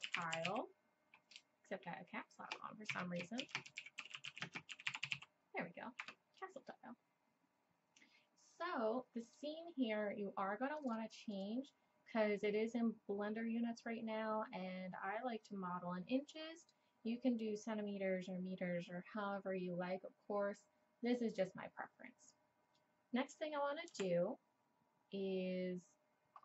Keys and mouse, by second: 9.2-13.2 drag, 13.2 middle click, 13.7-16.7 middle drag, 23.9 n.